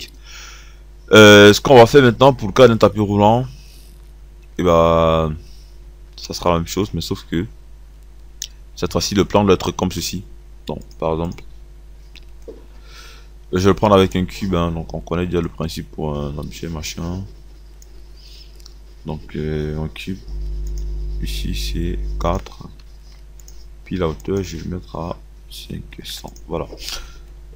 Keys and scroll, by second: 23.2 KP_4, 25.5 KP_5, 26.0 KP_0, 26.5 KP_0.